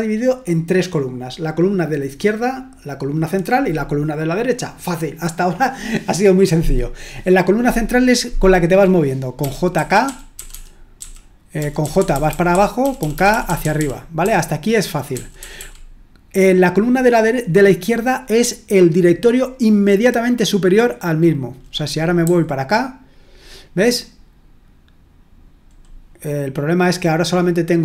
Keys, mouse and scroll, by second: 9.4-15.5 typing, 22.2 typing.